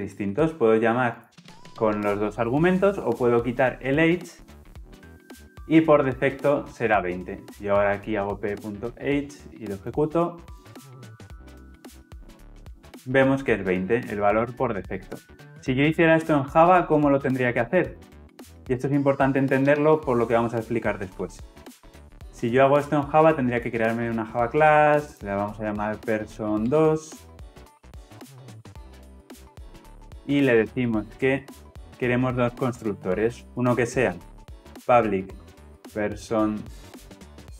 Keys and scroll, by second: 21.7 alt+Insert.